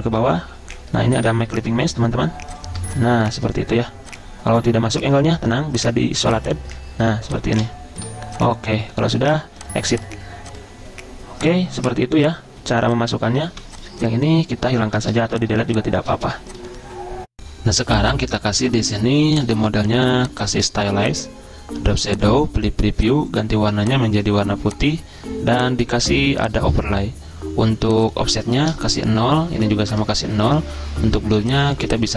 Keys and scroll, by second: 0.3 ctrl+[, 0.4 ctrl+[, 1.7 ctrl+], 1.8 ctrl+], 12.3 z, 13.7 v, 15.0 ctrl+3, 15.4-17.0 typing, 28.6 0, 28.9 Tab, 29.9 0, 30.1 Tab.